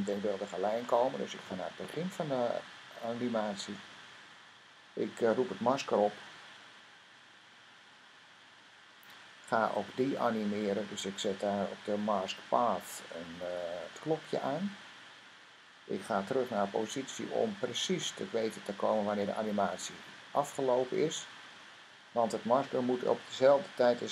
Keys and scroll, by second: 8.5 m, 17.1 p, 23.7 m.